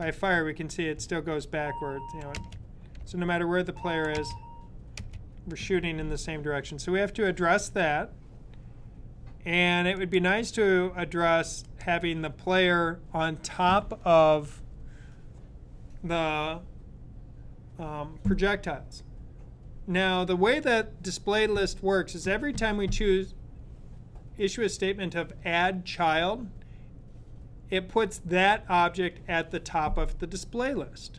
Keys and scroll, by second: 0.8-1.6 Right, 3.5 Left.